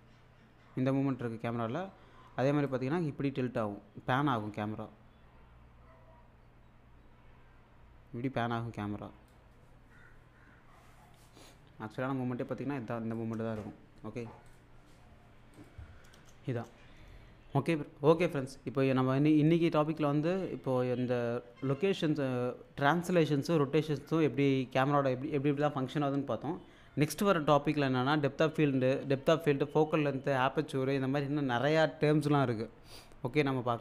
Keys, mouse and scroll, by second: 11.5-13.4 drag, 16.2 space.